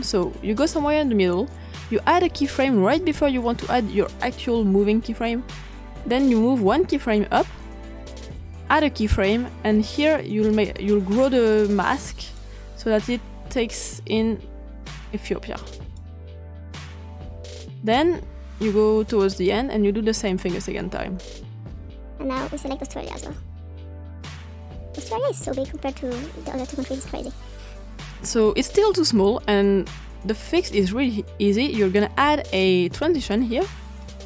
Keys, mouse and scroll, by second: 0.0 click, 0.5 click, 2.9 click, 5.9-6.7 scroll down 2, 8.6 click, 11.5 click, 13.5-16.0 drag, 16.6-17.6 drag, 19.2 click, 20.4 click, 21.5 scroll down 2, 22.1 click, 22.8 click, 23.9-25.1 drag, 25.8 click, 30.1-31.2 scroll down 2, 31.8-33.2 drag, 34.0-34.2 drag.